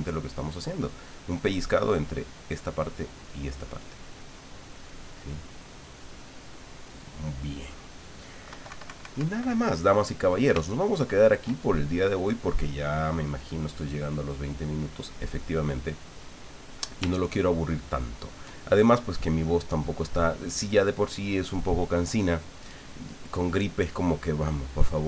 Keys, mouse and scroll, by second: 0.6 middle click, 2.4 click, 3.3 click, 3.9-6.1 drag, 6.3 middle click, 6.9 click, 8.5 KP_Subtract, 9.6-10.6 drag, 10.7-12.2 shift+drag, 13.4 click, 14.8 click, 17.3-18.5 shift+drag.